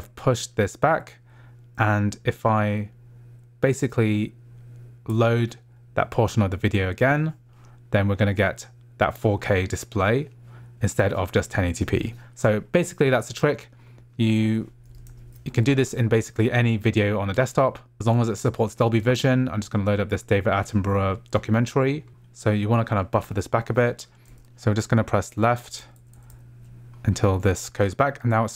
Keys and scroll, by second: 2.1 Right, 5.1 Left, 15.1 ctrl+alt+shift+d, 23.6 ctrl+alt+shift+d, 25.0 Left.